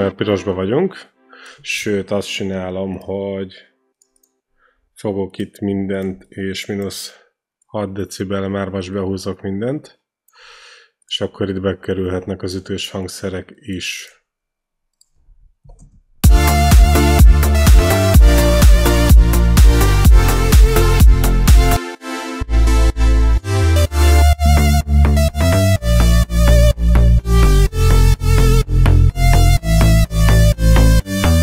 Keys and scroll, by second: 2.1 ctrl+z, 15.9 ctrl+shift+l, 16.0 space, 25.5 alt+Right.